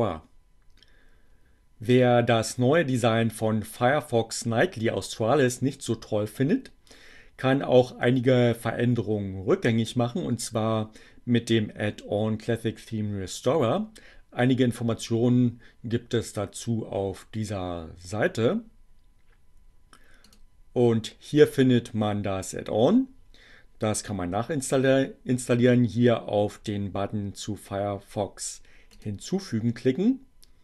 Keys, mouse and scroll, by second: 20.3 click, 28.0-29.2 drag.